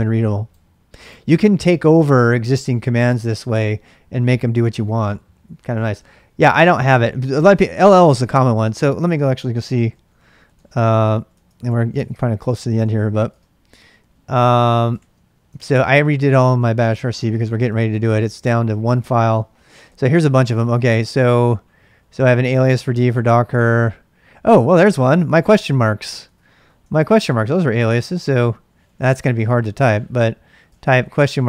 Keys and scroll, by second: 8.7-13.1 typing, 13.3 Return, 14.9-25.3 typing, 26.2 ctrl+j, 26.9 ctrl+[, 26.9 ctrl+j, 27.2 shift+z, 27.4 shift+z, 28.6-30.3 typing, 30.6 Return.